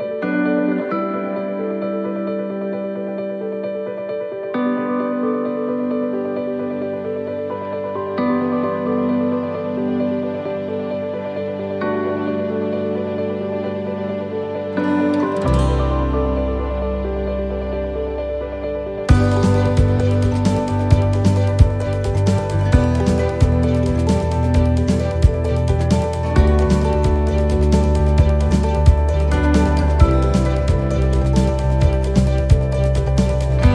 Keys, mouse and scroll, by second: 3.8 ctrl+r, 3.8 middle click, 5.3 click, 6.4 right click, 7.1 shift+right click, 7.9 shift+right click, 8.5 right click, 9.4 shift+right click, 12.4-12.9 scroll down 4, 12.9 middle click, 13.7 scroll down 1, 14.1 middle click, 14.7 middle click, 15.2 c, 24.2 middle click, 25.0 c, 27.1 middle click, 27.5 c, 29.6 shift+right click, 32.0 shift+right click, 32.0 middle click, 32.8 shift+right click, 33.5 middle click.